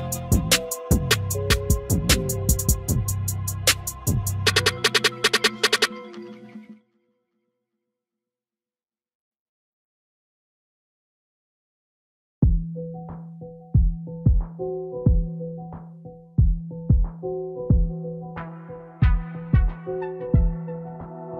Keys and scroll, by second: 19.0 ctrl+i.